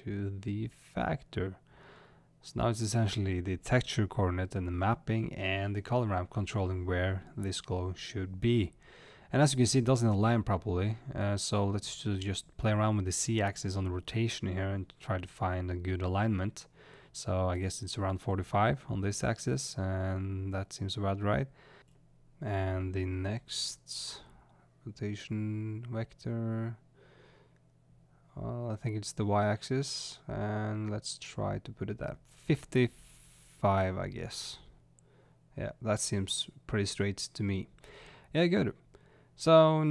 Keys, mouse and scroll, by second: 0.4 click, 4.1 click, 7.1-7.8 scroll up 2, 8.3-9.2 middle drag, 9.2 click, 9.9-34.9 drag, 25.1 ctrl+z, 26.4 ctrl+z, 34.8 5, 35.5-36.0 scroll up 1, 36.0 click, 36.0-38.6 middle drag, 37.6-38.3 scroll down 2, 39.0-39.9 middle drag.